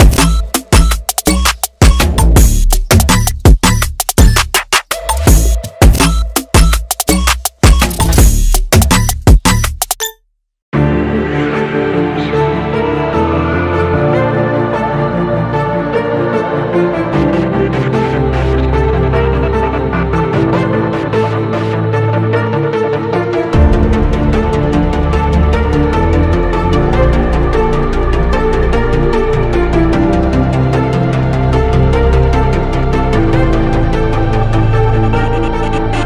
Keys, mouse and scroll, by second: 2.7-3.2 alt+scroll down 2, 3.2 click, 4.5 Return, 4.8-6.0 drag, 7.5 click, 8.6 alt+scroll up 1, 8.9 scroll down 1, 9.7 click, 10.6-11.2 typing, 11.2 ctrl+Num_Lock, 11.2 click, 11.4 ctrl+j, 12.3-15.5 drag, 15.8 Return, 16.2 alt+scroll down 1, 17.0-21.9 drag, 22.3 ctrl+a, 22.8 ctrl+c, 23.1 click, 24.2 ctrl+v, 24.8 click, 25.7 click, 27.2 click, 28.0 ctrl+t, 29.0 click, 29.9 alt+scroll up 1, 30.3-36.0 drag, 32.4 typing.